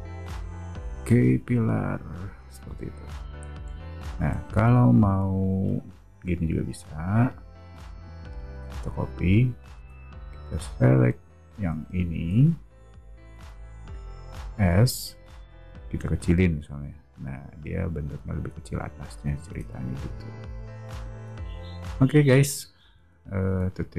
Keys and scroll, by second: 4.5 space, 6.5 m, 9.7 space, 11.4 o, 13.3 space, 14.5 s, 19.5 space, 20.4 o.